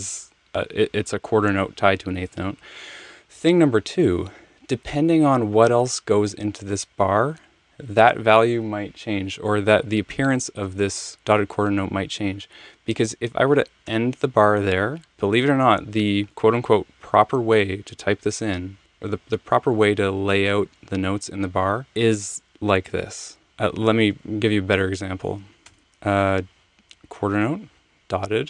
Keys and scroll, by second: 13.8 Return, 25.6 BackSpace, 25.8 Tab, 25.8 Return, 27.9 ..